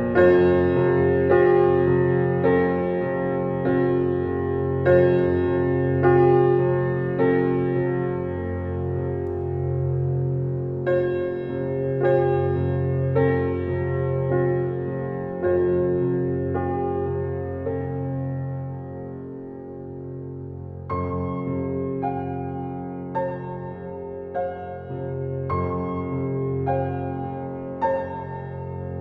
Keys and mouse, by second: 0.2 ctrl+s, 4.6-5.3 drag, 6.5 click, 7.6 click, 7.9 click, 9.0 click, 10.1 Left, 10.6-13.0 typing, 14.0 click, 14.3-14.9 drag, 15.3-16.2 alt+shift+drag, 17.4 click, 19.3-19.9 drag, 20.8-21.6 typing, 26.3 F12.